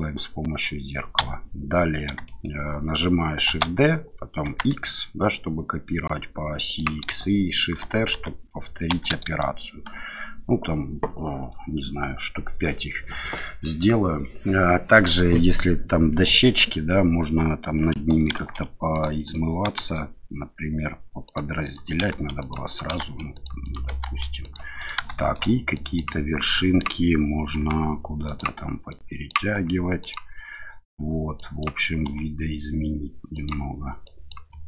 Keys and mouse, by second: 1.2 a, 2.2 shift+click, 3.5 shift+d, 4.5 x, 6.6 click, 7.8 shift+r, 8.1 shift+r, 8.9 shift+r, 18.3 ctrl+r, 19.2 click, 19.7 ctrl+r, 21.6 click, 22.1 ctrl+r, 22.7 click, 23.0 ctrl+r, 23.6 click, 24.0 ctrl+r, 24.8 click, 25.1 shift+middle click, 25.8 click, 26.6 click, 27.6 g, 28.2 click, 28.9 click, 29.5 g, 30.0 click, 31.3 click, 32.0 g, 33.3 click, 34.0 click, 34.5 g.